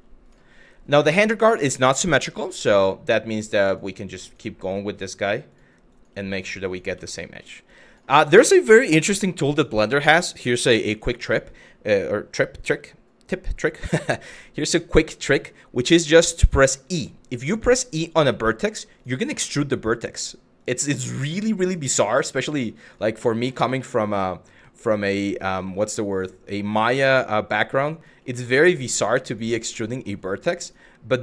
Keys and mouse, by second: 1.3 shift+middle click, 1.8 click, 1.9 g, 3.3 click, 3.9 click, 5.1 click, 5.5 click, 6.3 click, 6.7 middle click, 7.5 click, 10.9 shift+middle click, 17.8 e, 18.6 click, 19.0 e, 20.2 click, 21.3 click, 22.5 click, 23.5 shift+middle click, 25.0 click, 26.5 click, 28.9 click, 29.4 shift+middle click.